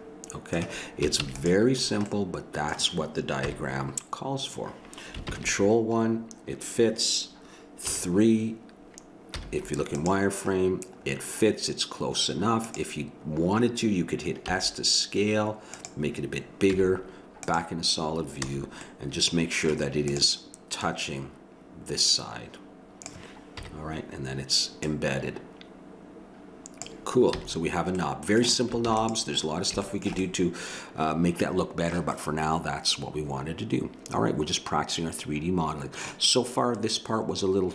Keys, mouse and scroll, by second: 1.2 ctrl+s, 3.4 KP_1, 5.3 ctrl+KP_1, 7.8 KP_3, 9.3 z, 12.7-14.5 drag, 14.5 s, 16.7 z, 18.5 a, 19.1 middle click, 20.1-21.6 right drag, 22.0 click, 22.0 a, 23.6 KP_1, 24.9 click, 27.4 a, 28.0-29.5 middle drag, 28.8 ctrl+s, 29.9 middle click, 30.5-32.1 middle drag, 32.3-34.1 middle drag.